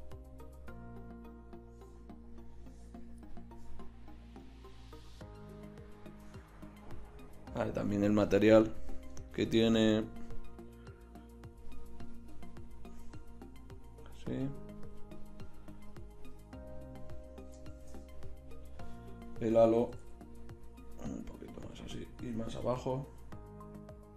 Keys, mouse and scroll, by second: 7.1-10.2 right drag, 10.2-12.0 drag, 17.8 shift+z, 19.9 r, 22.3 r.